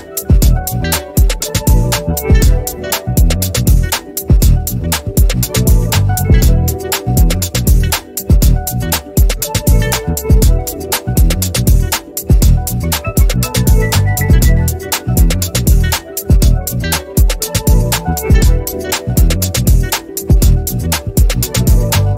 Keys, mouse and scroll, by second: 3.7-12.8 drag, 15.9 ctrl+scroll down 1, 16.7 click, 17.5 ctrl+z, 18.0 click, 19.8 ctrl+d, 20.8 click, 20.9 click.